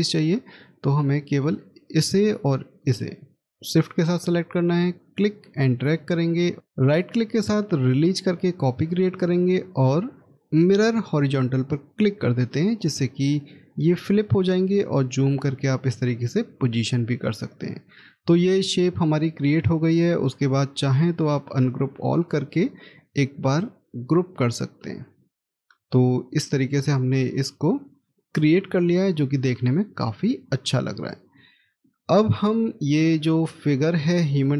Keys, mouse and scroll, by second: 2.7 shift+click, 6.5 shift+right click, 13.5-13.9 scroll up 1, 16.0 scroll down 1, 17.5 middle click, 23.4 right click, 28.6-29.2 scroll down 1, 31.7 scroll up 1, 31.7 middle click, 33.5-34.5 scroll up 1.